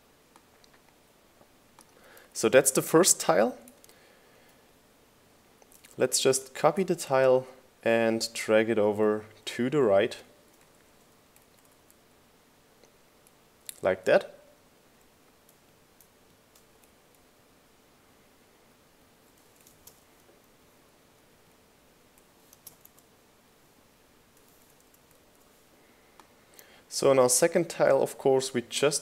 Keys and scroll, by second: 5.3 super+v, 5.7 shift+Right, 8.9 shift+Right, 10.1 shift+Right, 12.8 shift+Left, 13.3 Right, 14.2 Left, 19.5 Down, 22.2 Right, 22.5 space, 22.8 Return, 25.1 Right, 25.4 space, 25.5 q, 25.7 Return, 27.1 Right, 27.7 BackSpace, 27.9 1, 28.2 Return.